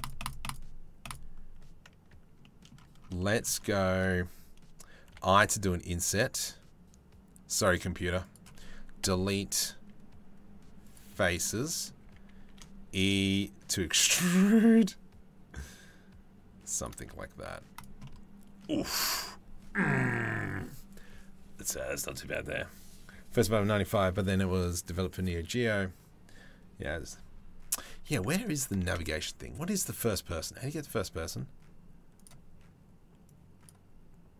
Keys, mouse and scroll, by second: 0.0 click, 0.6 click, 2.0 middle click, 2.8 shift+middle click, 4.9 i, 8.6 Delete, 11.0 click, 11.6 a, 12.9 e, 16.9 Tab, 17.4 click, 17.6 click, 28.9 ctrl+s, 29.5-31.9 middle drag.